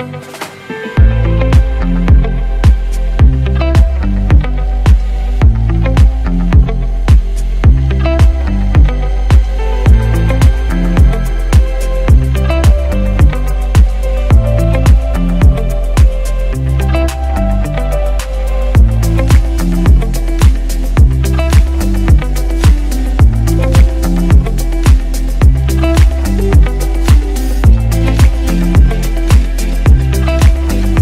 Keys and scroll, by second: 0.6 ctrl+BackSpace, 0.8 Down, 0.9 Down, 1.1 Down, 2.1 Down, 2.3-3.6 typing, 4.9 ctrl+t, 8.2-9.2 typing, 12.2 c, 15.1 ctrl+s, 16.3 Return, 21.3 ctrl+a, 21.9 ctrl+c, 22.2 ctrl+w, 22.4 ctrl+Tab, 24.3 v, 26.5 ctrl+b, 29.5 ctrl+v.